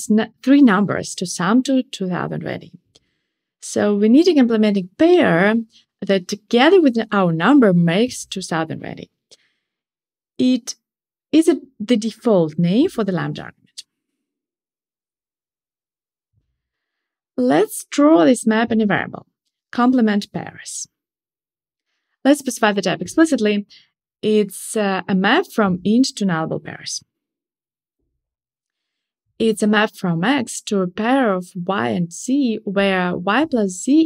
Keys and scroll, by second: 23.7 alt+Return, 27.4 alt+super+l.